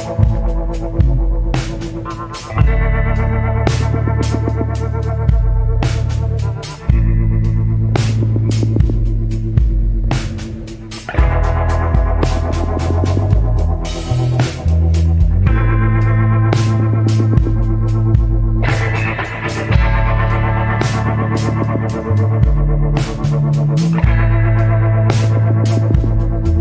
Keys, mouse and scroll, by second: 0.9 scroll down 1, 1.6 scroll up 1, 3.2 scroll down 1, 3.8 scroll up 1, 5.1 scroll down 1, 6.1 scroll up 1, 9.3 scroll up 1, 15.4 scroll down 1.